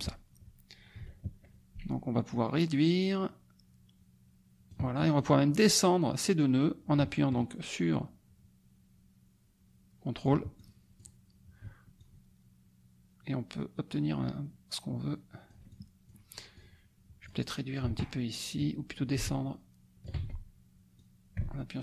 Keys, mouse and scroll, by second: 2.3-4.8 ctrl+shift+drag, 4.9 ctrl+shift+click, 6.2-10.4 drag, 10.5 ctrl+click, 11.9-16.2 ctrl+shift+drag, 16.5 click, 19.1-20.2 ctrl+shift+drag, 20.1 ctrl+shift+z, 20.9-21.8 drag.